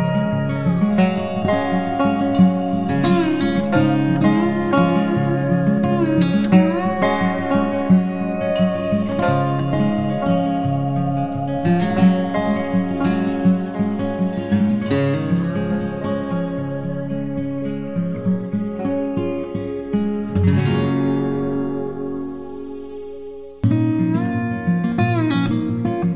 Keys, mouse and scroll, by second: 22.2 click, 22.4 click, 22.6 typing, 22.7 click, 23.3 double click, 25.1 ctrl+-, 25.3 ctrl+-.